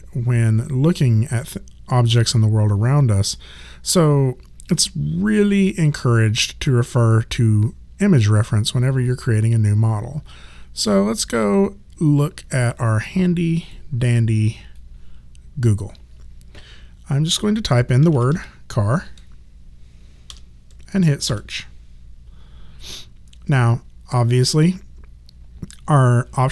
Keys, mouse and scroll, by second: 13.6 click, 17.3 click, 17.8-18.7 typing, 20.3 BackSpace, 21.3 Return, 24.5 click.